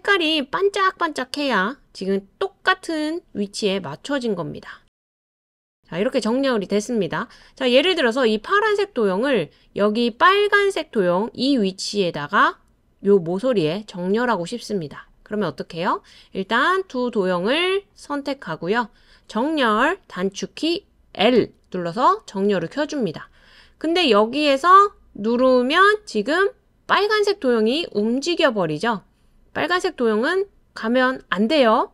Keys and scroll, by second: 21.4 i.